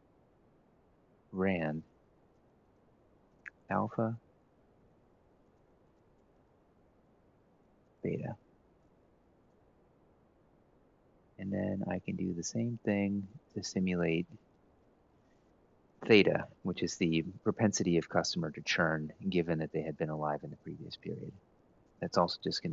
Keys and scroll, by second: 0.0-1.4 typing, 3.6-4.3 typing, 5.5-6.2 typing, 8.7 F4, 9.4-10.1 typing, 12.9 Tab, 21.5-22.7 typing.